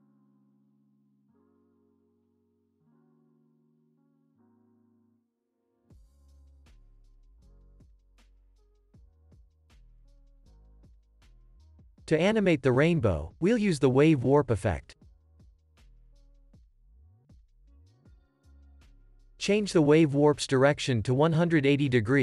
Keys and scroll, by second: 1.3 Home, 1.5 space, 7.4 space, 7.8 s, 10.0 s, 15.6-16.6 typing, 16.8 Down, 17.3 Return, 20.8 8.